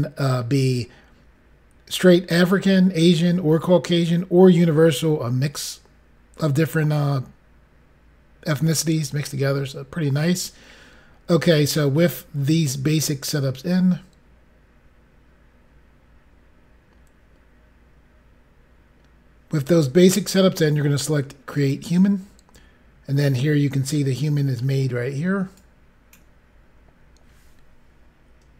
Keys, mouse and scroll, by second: 13.5 scroll down 1, 14.1-14.6 scroll down 1, 14.6 scroll down 2, 21.5 click, 22.8-23.3 scroll up 5, 23.8 middle click, 25.5 click, 26.4-27.0 scroll up 2.